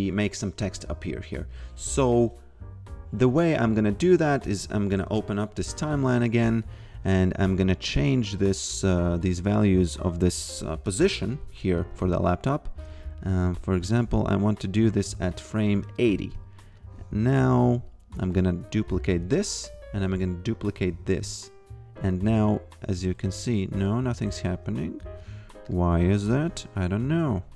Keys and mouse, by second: 1.5 click, 5.0 shift+F3, 5.9 click, 8.4 click, 10.8 click, 13.2 click, 15.1 a, 16.8 ctrl+click, 18.6 click, 20.1 ctrl+click, 22.5 click, 24.5 ctrl+z, 25.7 click, 26.2 ctrl+click.